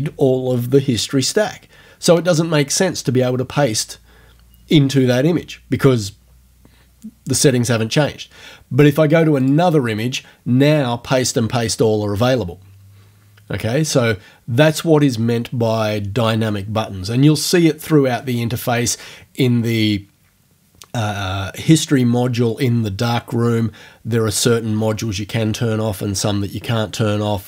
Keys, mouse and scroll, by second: 9.5 click.